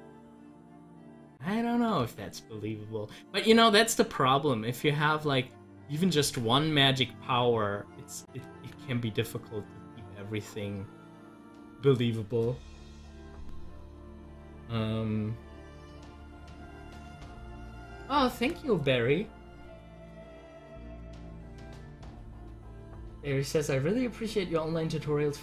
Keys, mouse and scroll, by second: 0.2 ctrl+z, 2.0 ctrl+z, 6.2 ctrl+z, 8.6 z, 9.1-20.3 drag.